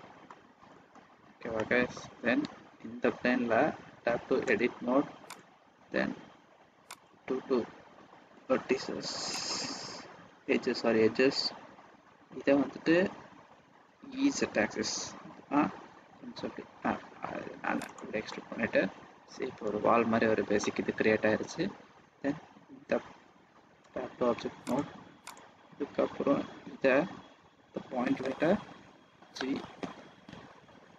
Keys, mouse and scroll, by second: 0.2 middle click, 0.8-1.3 scroll down 3, 1.5 middle click, 1.9-2.8 scroll down 3, 4.3 Tab, 5.2 click, 7.3 click, 10.2 scroll down 1, 14.0 e, 18.2 middle click, 20.0-20.3 scroll up 4, 20.5 middle click, 20.5-21.0 scroll down 1, 23.8 Tab, 24.6 click, 25.2 click, 29.8 g.